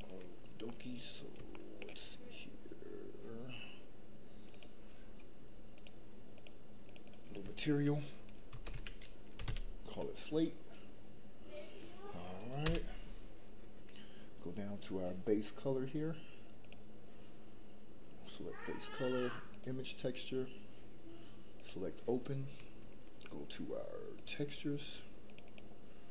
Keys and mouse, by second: 0.6 middle click, 1.5 shift+middle click, 5.7 click, 6.3 click, 6.8 click, 7.2-12.7 drag, 16.6-19.8 drag.